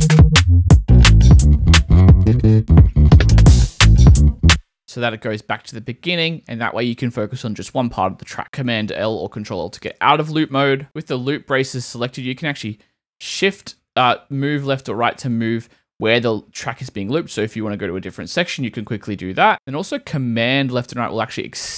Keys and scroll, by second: 4.4 space, 8.4 super+l, 12.4 shift+Right, 17.1 shift+Right, 18.7 shift+Right, 19.5 super+Left.